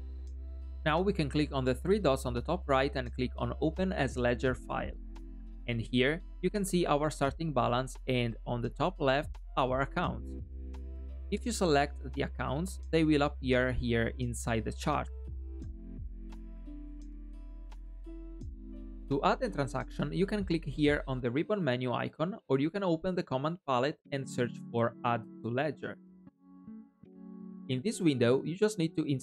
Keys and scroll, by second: 0.0 alt+e, 22.9 super+p.